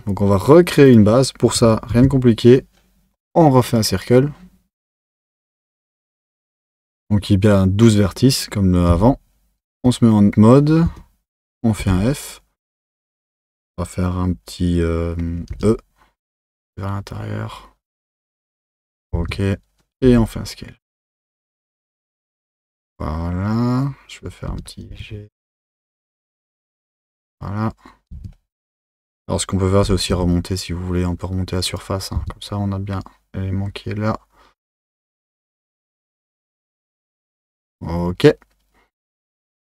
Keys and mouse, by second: 0.8 click, 1.9 shift+a, 8.9 Tab, 9.7 Tab, 10.9 1, 11.8 f, 19.1 Tab, 20.0 s, 28.1 Tab, 29.8 g, 32.1 Tab.